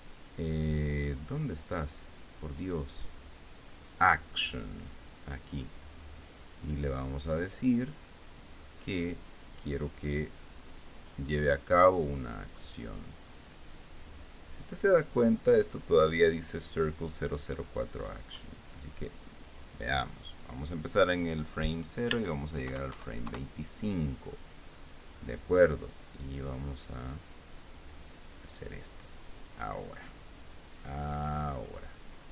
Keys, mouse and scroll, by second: 5.4 click, 7.4-9.0 drag, 11.4 click, 18.5 click, 20.2 click, 23.3 Tab, 23.6 KP_5, 23.9 KP_Enter, 27.2-29.4 drag, 31.8 click.